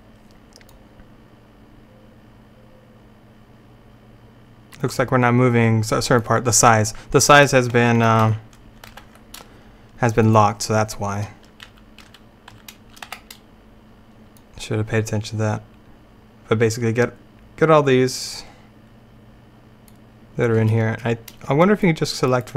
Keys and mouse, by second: 0.8-2.6 drag, 2.8-4.7 middle drag, 8.3 ctrl+z, 9.0 ctrl+z, 10.3-11.7 drag, 11.7 a, 12.0 click, 12.1 a, 12.6 a, 13.1 b, 21.7-22.5 drag.